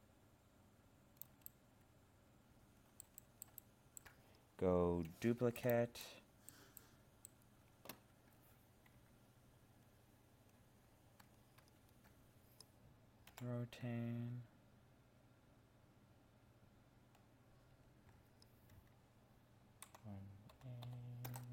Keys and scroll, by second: 11.6 ctrl+1.